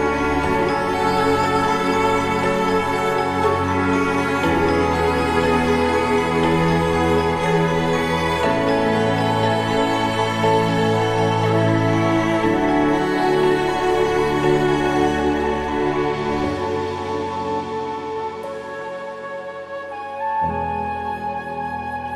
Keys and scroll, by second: 20.0 ctrl+0.